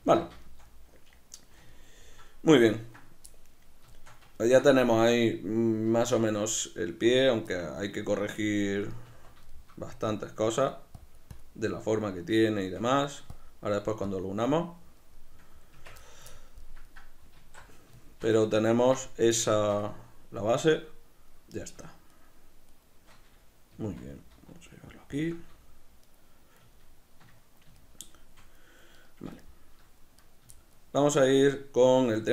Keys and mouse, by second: 0.0 z, 9.1 Tab, 9.2 b, 9.5 shift+middle click, 10.1 click, 11.7-13.4 middle drag, 13.4 shift+click, 14.7-22.1 middle drag, 15.8 b, 15.8 Tab, 17.4 alt+q, 22.1-23.7 shift+right drag, 23.7 g, 25.2 shift+click, 26.0 right click, 26.7-28.9 ctrl+middle drag, 28.9 right click, 29.4 shift+middle click, 30.2 right click, 30.6-32.3 shift+middle drag.